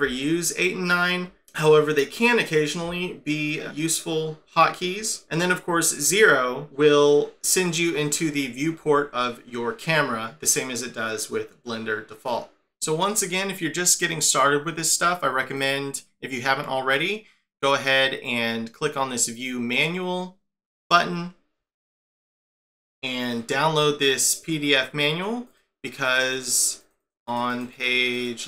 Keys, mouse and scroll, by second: 0.0-1.0 8, 2.8-3.6 9, 6.7 0, 15.5 click.